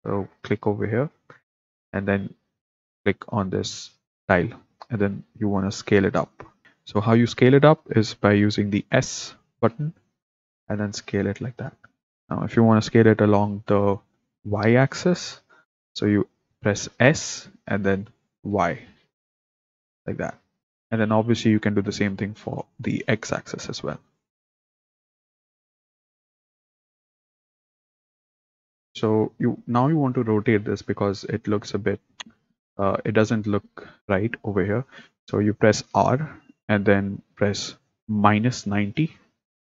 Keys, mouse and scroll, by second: 0.1-1.8 drag, 6.1 s, 9.8 s, 17.0 s, 20.6 Escape, 22.4 s, 24.4-27.7 typing, 35.9 r.